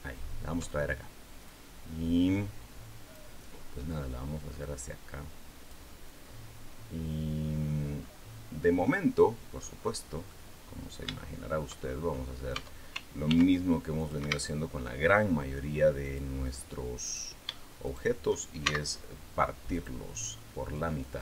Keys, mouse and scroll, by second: 1.3-3.1 drag, 3.7-5.7 drag, 7.8-8.3 scroll up 1, 8.7 middle click, 9.5-10.1 scroll down 1, 10.1-11.6 middle drag, 12.3 Tab, 13.1 ctrl+r, 13.8 click, 14.0 Escape, 15.9 click, 16.9 right click, 17.7 shift+right click, 18.5 shift+x, 19.5 click, 21.0 click.